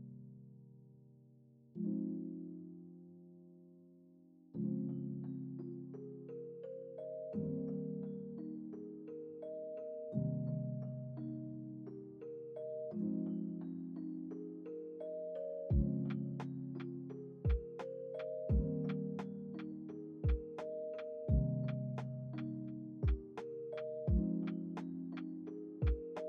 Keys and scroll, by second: 4.8 F9, 8.9 ctrl+s, 9.9 space, 14.8 space, 15.1 ctrl+s, 18.4 ctrl+c, 18.7 ctrl+v.